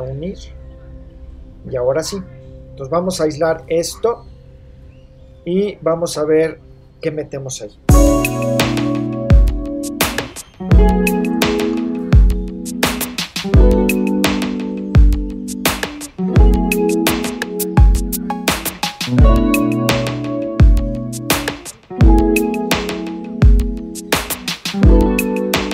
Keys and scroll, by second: 11.7 super+space, 12.4 l, 13.7 space, 22.2 super+s.